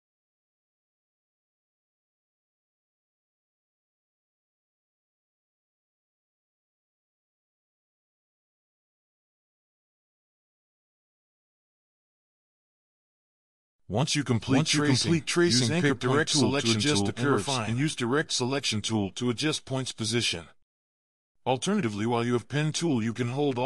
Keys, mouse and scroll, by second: 5.0 alt+click, 7.3 alt+click, 9.6 alt+click, 11.4 alt+click, 14.4 alt+scroll down 1, 15.0 scroll down 1, 21.0 alt+scroll up 1, 21.5-21.8 scroll down 1.